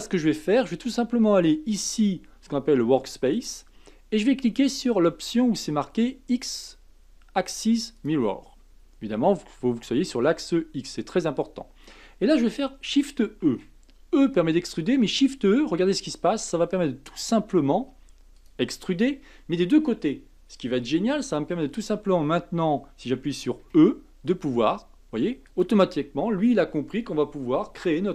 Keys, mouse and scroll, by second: 3.3 click, 8.0 click, 13.4 shift+e, 23.6 e.